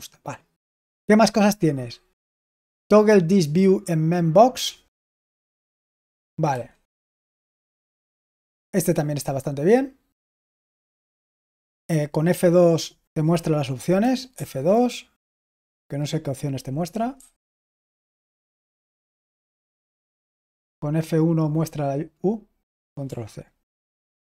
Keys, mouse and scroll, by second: 5.0-6.7 typing, 14.2 F2, 15.3 F2, 17.0 F2, 17.6 F2, 20.3 F1.